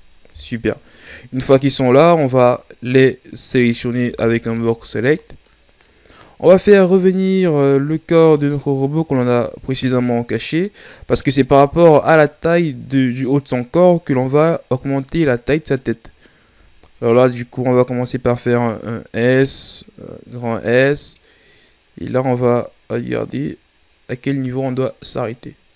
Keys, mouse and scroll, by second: 0.3 KP_1, 1.7-3.5 scroll down 2, 3.5 right click, 4.1 b, 8.4 click, 9.9-11.5 scroll down 3, 16.9 s.